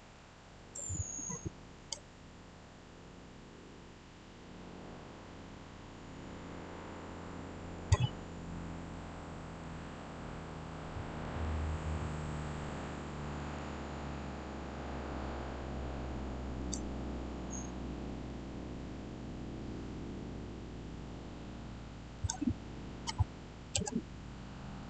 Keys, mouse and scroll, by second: 0.0-1.7 middle drag, 1.7 click, 7.6 click, 8.8-11.7 middle drag, 11.7 middle click, 11.7 scroll down 1, 13.3 click, 13.9 scroll down 1, 16.4 scroll up 1, 16.5 click, 17.5-20.3 middle drag, 20.3 scroll up 1, 22.0 click, 23.7 Return, 24.1 scroll down 1, 24.7 middle click.